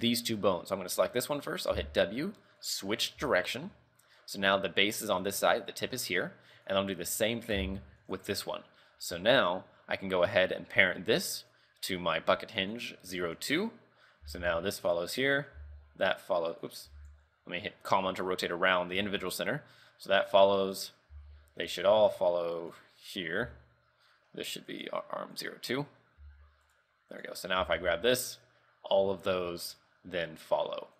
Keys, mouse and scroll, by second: 1.8 w, 3.4 shift+middle click, 6.6 right click, 7.1 right click, 7.6 w, 8.5 scroll down 3, 11.5 click, 13.5 Tab, 14.4 r, 15.3 right click, 15.7 r, 16.9 ,, 19.0 r, 20.9 right click, 21.2 r, 22.7 right click, 23.5 Tab, 24.8 click, 25.8 Tab, 26.3 r, 27.3 right click, 27.5 scroll down 4, 27.7 z, 27.9 r.